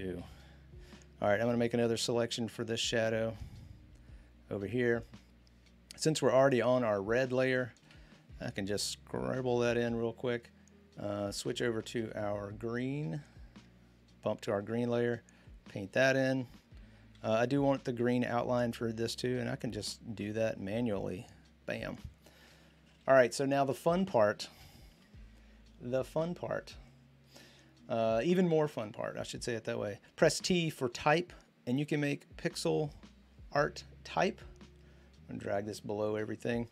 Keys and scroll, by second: 0.0-0.5 typing, 7.6-8.9 typing, 17.0 ctrl+d, 18.0 typing, 19.5 typing, 22.5-25.3 typing, 27.3-28.0 typing, 30.2 t.